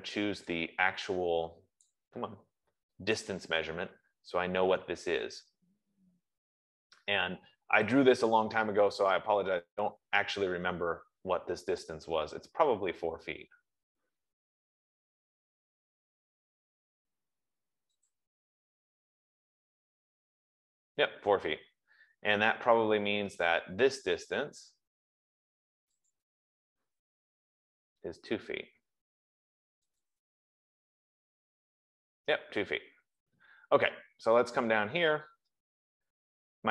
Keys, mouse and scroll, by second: 2.1 click, 3.7 click, 5.9-6.2 scroll, 11.4-12.0 scroll, 18.5 click, 21.8 Escape, 22.5-23.2 scroll, 26.4 click, 30.3 click, 33.0 Escape, 33.7-34.2 scroll, 34.4-34.8 scroll, 35.7-36.1 scroll, 36.4-36.7 scroll.